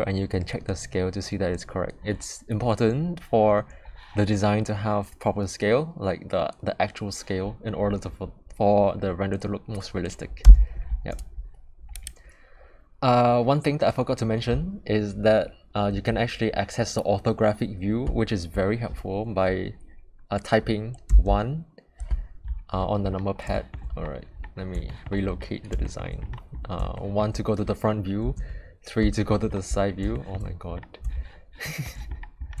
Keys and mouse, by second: 10.4 n, 11.9 click, 21.1 KP_1, 23.5 shift+middle drag, 24.9 shift+middle click, 25.8 shift+middle click, 26.9 shift+middle drag, 28.3 KP_3, 30.1 shift+middle click, 31.6 shift+middle click.